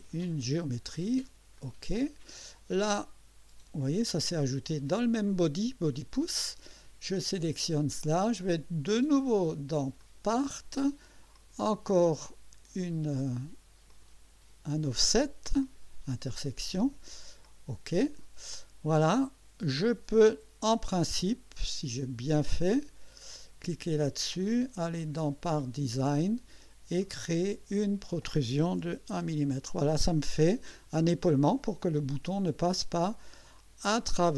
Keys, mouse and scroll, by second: 0.2 click, 1.6 click, 7.1 click, 9.1 click, 10.0 click, 11.4 click, 13.9 click, 15.6 click, 17.4 click, 23.2 click, 25.0 click, 25.6 click, 27.0 click, 28.8 1, 29.2 Return, 30.1 click, 31.0 click, 33.6 click.